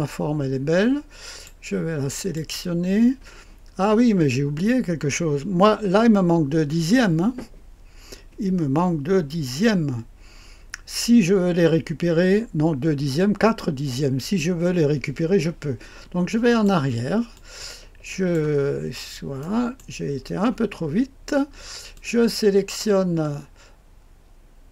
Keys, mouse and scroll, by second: 2.1 click, 16.4 click, 17.3-18.3 drag, 18.4 click, 19.3-20.6 middle drag, 20.1-21.4 scroll up 1, 21.4-21.9 scroll down 1, 21.9-23.0 drag, 23.0 middle click, 23.0-24.7 scroll up 1.